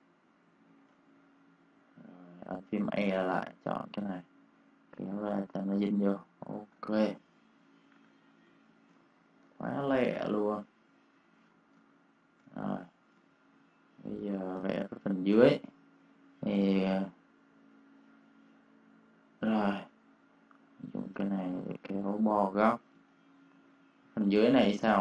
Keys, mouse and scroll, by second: 0.6 ctrl+shift+g, 0.9 click, 2.7 e, 3.4 click, 6.1 v, 6.3 click, 6.7 space, 6.7 click, 7.9 -, 8.3 space, 8.6 click, 9.4 v, 9.7 click, 10.5 shift+m, 10.7 shift+click, 11.3 shift+v, 11.5 click, 11.7 space, 11.8 click, 13.1 space, 13.2 click, 14.2 click, 15.2 m, 16.7 click, 22.5 v, 22.7 click, 22.8 space, 23.0 click.